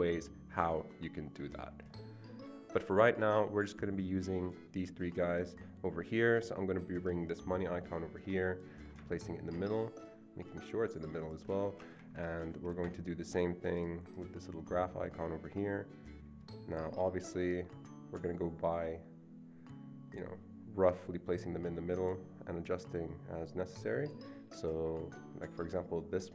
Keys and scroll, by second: 11.8 Escape, 11.9 Escape, 12.1 Escape.